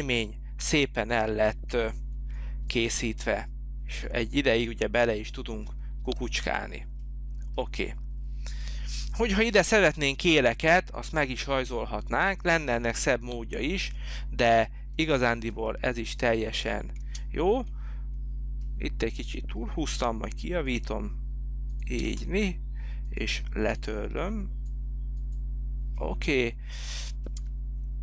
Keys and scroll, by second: 2.1 h, 16.9 space, 19.8 l, 27.4 t.